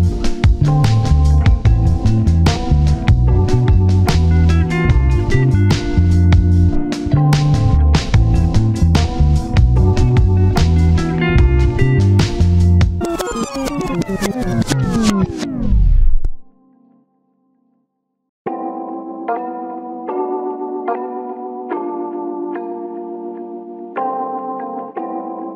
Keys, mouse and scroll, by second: 0.5 scroll up 1, 0.7 typing, 1.5 scroll down 1, 1.7 typing, 2.9 scroll down 1, 3.0 scroll up 1, 3.2-3.6 typing, 4.9 scroll down 1, 5.2 shift+middle click, 5.5 1, 5.9 scroll down 1, 6.0 1, 6.0 shift+middle click, 6.2 scroll up 1, 9.5-10.0 scroll down 2, 9.7 1, 10.0 1, 10.1 shift+middle click, 10.5 double click, 13.0 scroll down 1, 13.2-14.5 typing, 13.5 scroll up 1, 13.7 scroll down 1, 14.2-14.5 scroll up 1, 18.2 double click, 20.6 shift+middle click, 21.0 typing, 21.9 ctrl+KP_1, 22.3 shift+middle click, 22.4-22.7 shift+scroll up 1, 23.2 scroll down 1, 23.3 shift+middle click, 23.5-23.9 scroll up 1, 24.5-25.4 scroll down 1.